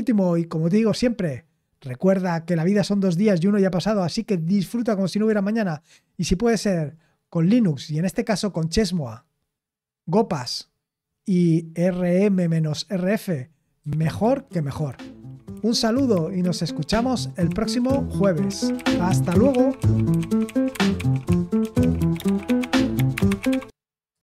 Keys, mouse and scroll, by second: 24.1 click.